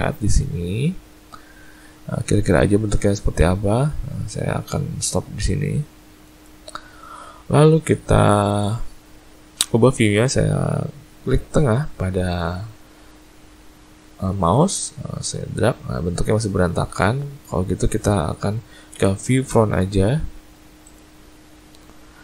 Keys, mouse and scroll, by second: 14.6 middle click, 16.6-17.7 scroll down 4, 18.9 `, 22.1-22.2 scroll up 1.